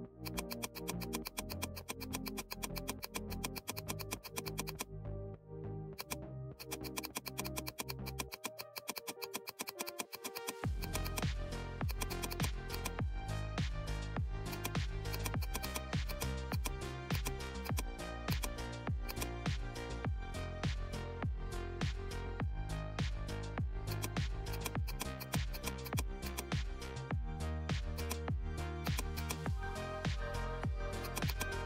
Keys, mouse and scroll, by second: 5.3 right click, 5.9 click, 5.9 click, 14.4-20.4 drag, 20.4 z, 22.3-23.0 typing, 23.8 click, 27.9-31.6 drag.